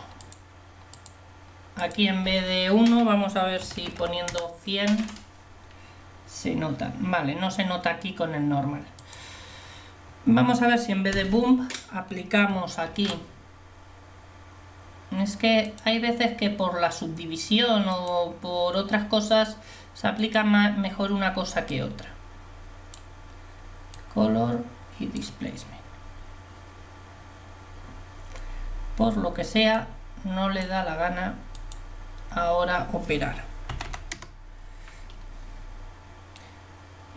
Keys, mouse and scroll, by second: 4.4 0, 11.3 Delete, 13.0 shift+a.